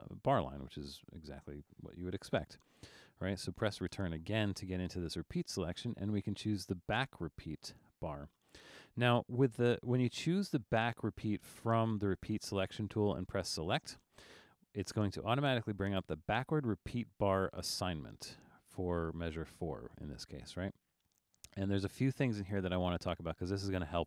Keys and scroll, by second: 3.9 Return.